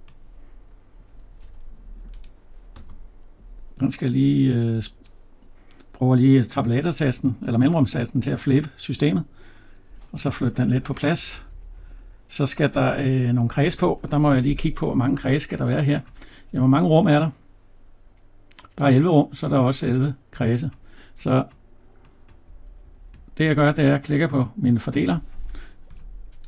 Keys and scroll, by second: 1.3 Escape, 10.5 Right, 25.7 Tab.